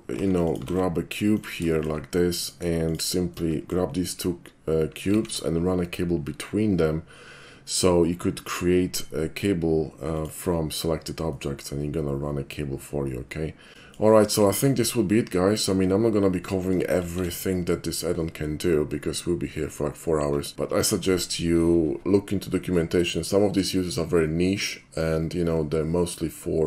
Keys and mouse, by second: 0.2 shift+d, 0.5 shift+click, 0.7 shift+d, 1.4 shift+click, 1.7 shift+middle drag, 2.4 shift+click, 2.8 shift+click, 3.3-3.7 shift+middle drag, 5.1 alt+shift+c, 10.1 click, 11.3-13.7 middle drag, 13.8 shift+middle click, 17.0 alt+shift+c.